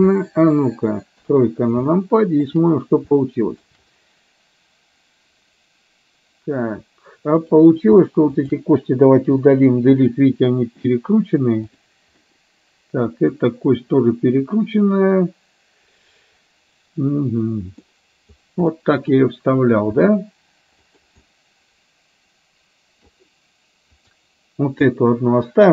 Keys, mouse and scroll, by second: 1.2 KP_3, 2.1 shift+middle click, 3.4 shift+middle click, 7.5 click, 8.4 shift+click, 10.1 Delete, 11.6 click, 12.2-17.9 middle drag, 18.7 middle click, 20.0 r, 21.2-23.1 middle drag, 24.0 click, 25.0-25.7 middle drag.